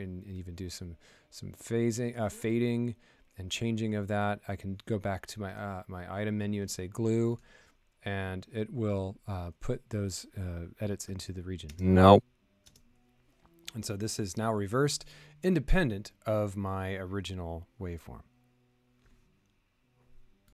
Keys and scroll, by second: 11.6 space, 12.6 space.